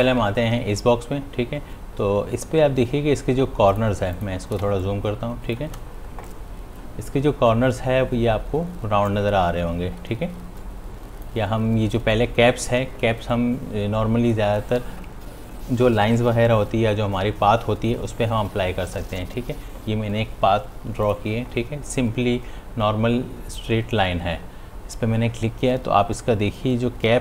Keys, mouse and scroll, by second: 7.4 space, 12.3 space, 20.6 click.